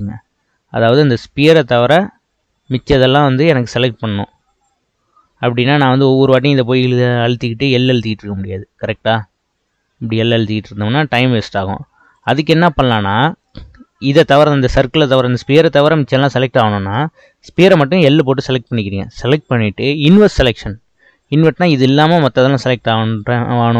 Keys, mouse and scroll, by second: 0.1-2.6 scroll up 3, 4.4-6.3 scroll down 2, 6.3 click, 7.7 l, 8.8 l, 10.6 l, 12.2 click, 18.2 l.